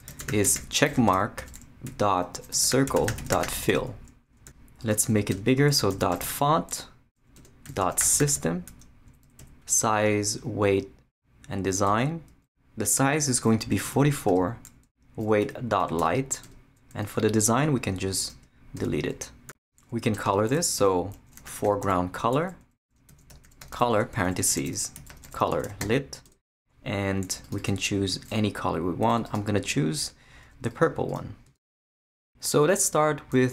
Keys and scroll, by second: 0.0-4.0 typing, 5.3 Return, 5.5 Tab, 5.7-8.8 typing, 7.3 Return, 9.1 Down, 11.9 Return, 13.7 4, 14.3 Tab, 15.6 •, 17.4 Return, 18.8 shift+BackSpace, 20.1 Return, 20.2 Tab, 20.8-26.0 typing, 26.2 Return, 31.5 Tab.